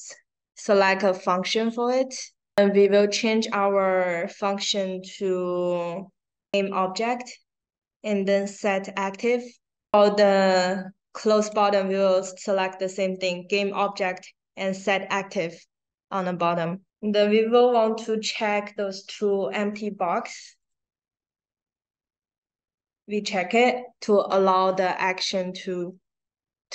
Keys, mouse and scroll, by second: 11.4 click, 19.1 click, 20.5 click.